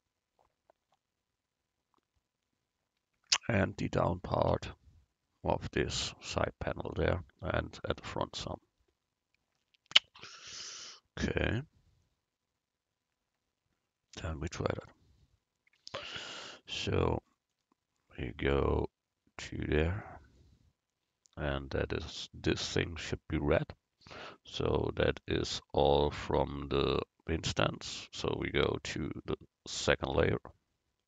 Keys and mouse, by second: 30.2 Tab.